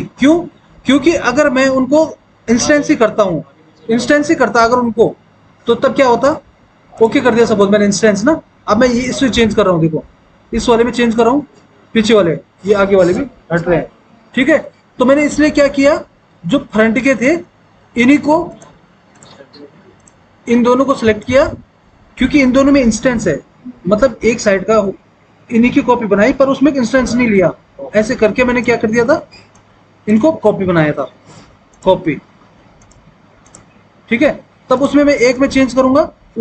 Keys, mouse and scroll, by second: 7.1 click, 15.1 ctrl+z, 16.8 ctrl+z, 17.4 ctrl+z.